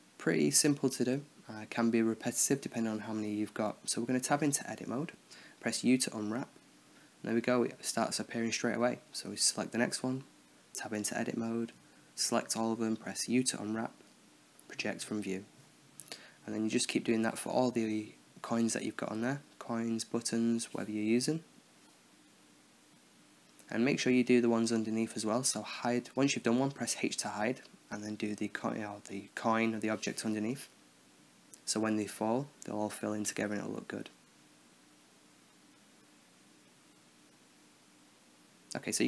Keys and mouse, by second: 0.3 click, 2.1 Tab, 2.8 a, 3.6 u, 8.8 Tab, 9.4 right click, 9.8 Tab, 10.6 a, 11.3 u, 12.3 Tab, 13.0 Tab, 13.5 u, 14.4 a, 14.7 u, 15.7 Tab, 16.5 right click, 16.9 Tab, 17.6 a, 17.8 a, 18.0 a, 18.4 u, 20.1 Tab, 20.4 right click, 20.6 Tab, 21.3 a, 21.6 a, 21.9 a, 22.3 u, 24.4 Tab, 24.5 Tab, 24.5 click, 24.5-31.9 typing, 24.8 Tab, 25.0 click, 25.0 right click, 25.3 Tab, 25.5 Tab, 25.5 right click, 25.6 Tab, 25.7 Tab, 25.7 right click, 25.9 Tab, 26.0 right click, 26.2 Tab, 26.3 right click, 26.6 Tab, 26.8 Tab, 26.9 right click, 26.9 Tab, 27.1 Tab, 27.2 right click, 27.6 right click, 27.9 Tab, 28.3 right click, 28.8 Tab, 28.8 right click, 29.0 Tab, 29.2 click, 29.4 Tab, 29.5 Tab, 29.5 click, 29.8 Tab, 29.9 Tab, 29.9 click, 29.9 Tab, 30.0 Tab, 30.2 Tab, 30.4 Tab, 30.4 click, 30.7 Tab, 31.2 Tab, 31.3 Tab, 31.6 Tab, 31.7 Tab, 31.8 Tab, 32.0 Tab, 32.1 alt+h, 32.5 right click, 33.0-34.3 drag.